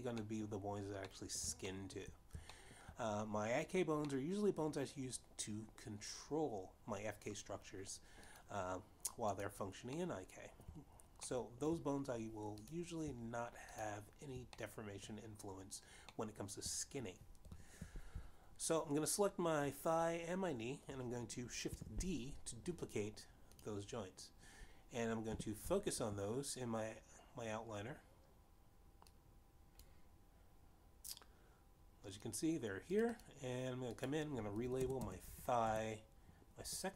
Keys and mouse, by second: 0.1 click, 1.2 middle click, 2.2 middle click, 2.7 shift+middle click, 3.6 shift+middle click, 5.1 middle click, 9.0 click, 10.4 click, 11.0 middle click, 12.3 shift+middle click, 13.6 click, 14.8 shift+click, 15.6 middle click, 17.2 middle click, 22.1 shift+d, 23.7 click, 26.4 f, 30.0 click, 33.7 click, 35.0 click, 35.5-36.9 typing.